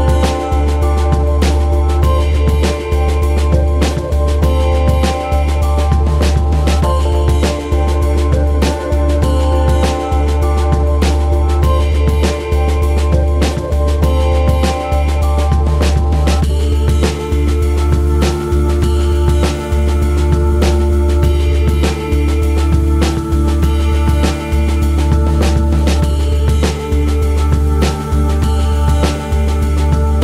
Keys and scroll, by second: 3.4 ctrl+Tab, 7.9 t, 10.5 space, 14.4 z, 16.1 space, 16.9 KP_3, 21.8 z, 22.3 z, 25.6 ctrl+Tab, 26.4 z, 27.1 KP_3.